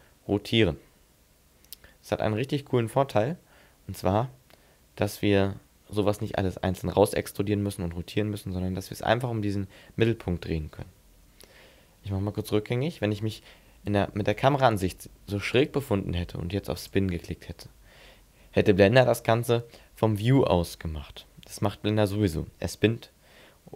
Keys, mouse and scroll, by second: 10.9 ctrl+z, 12.6 middle click, 14.1 shift+middle click, 16.8 click.